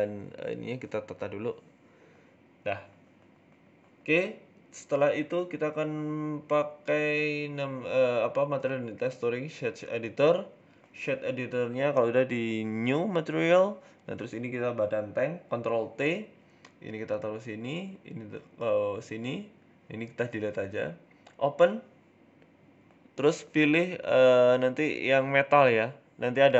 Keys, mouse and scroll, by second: 0.9 middle click, 1.6-2.5 scroll down 4, 1.8 middle click, 2.5-3.3 scroll up 2, 3.4 right click, 3.6-4.3 scroll up 4, 4.3 shift+middle click, 5.4 click, 6.2 click, 7.1 click.